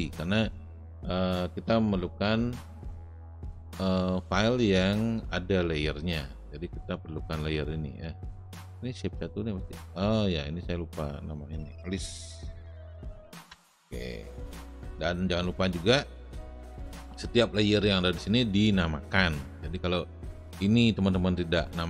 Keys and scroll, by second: 13.0 s, 13.4 Return.